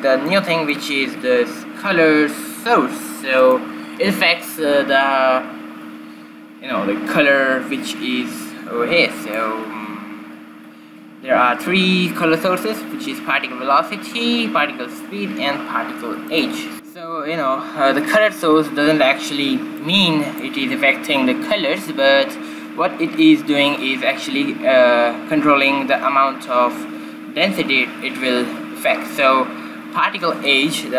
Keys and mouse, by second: 0.8-3.1 middle drag, 4.3-6.2 drag, 10.2-12.1 drag, 16.9 shift+z, 20.8-22.7 drag.